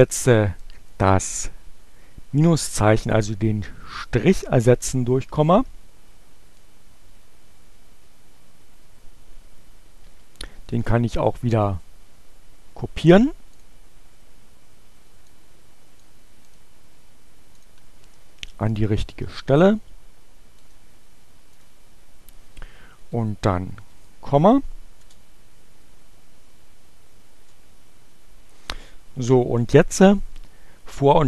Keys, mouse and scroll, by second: 4.5 Up, 6.3 Left, 7.5 Delete, 10.8 click, 13.6 click, 15.0 click, 16.1 right click, 17.5 click, 18.6 click, 20.3 right click, 21.5 click, 22.4 Right, 22.7 ,, 24.9 Return, 25.9 Up, 27.5 Return.